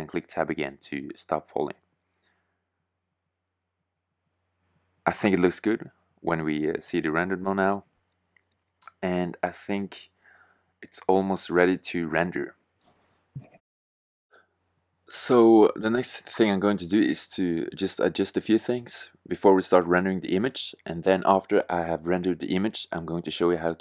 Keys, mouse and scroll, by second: 0.9 click, 1.7-2.7 drag, 3.9 shift+z.